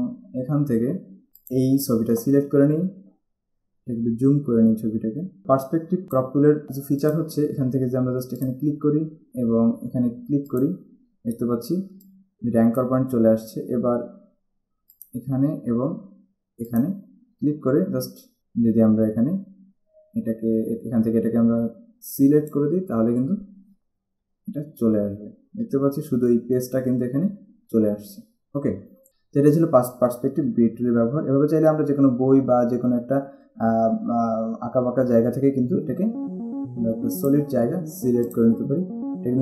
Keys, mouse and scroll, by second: 1.5 click, 4.0-4.4 scroll up 1, 4.5 scroll up 1, 6.0 click, 8.6 click, 10.7 click, 12.0 space, 12.4 click, 15.2 click, 16.9 click, 22.3 click, 24.5 alt+scroll down 1, 25.1-25.6 scroll down 2, 25.9 space, 26.8-27.1 scroll down 1, 37.3 ctrl+click.